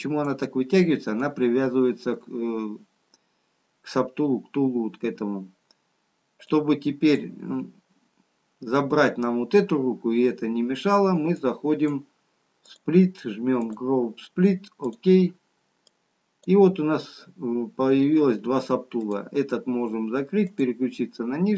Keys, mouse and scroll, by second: 9.1 click, 11.2 click.